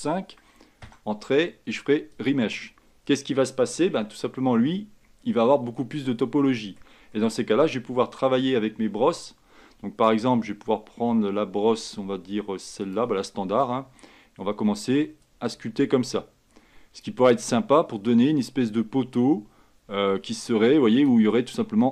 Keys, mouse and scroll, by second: 4.1 Tab, 5.1-5.6 scroll up 4, 5.6 scroll down 2, 6.0-7.8 middle drag, 7.8 Tab, 13.0-21.9 drag.